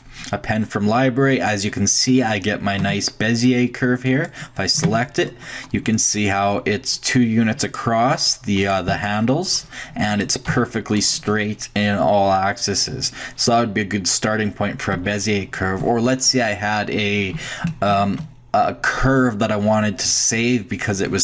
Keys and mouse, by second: 2.8 Tab, 4.8 Tab, 8.6 click, 8.9 g, 10.5 g, 15.2-16.3 middle drag.